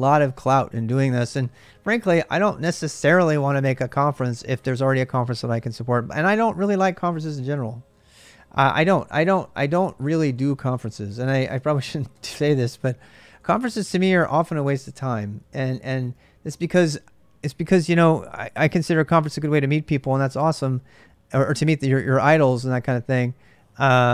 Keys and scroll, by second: 6.2-15.2 typing.